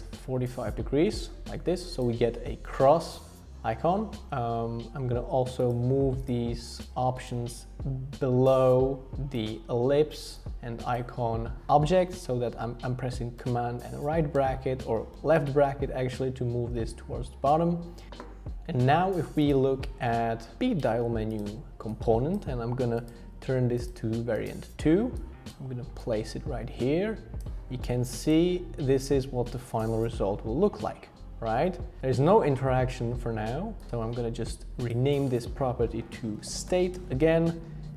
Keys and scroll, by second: 13.4 super+], 14.3 super+], 14.8 super+[, 15.4 super+[, 16.5 super+[, 32.0 BackSpace, 36.1-37.2 typing.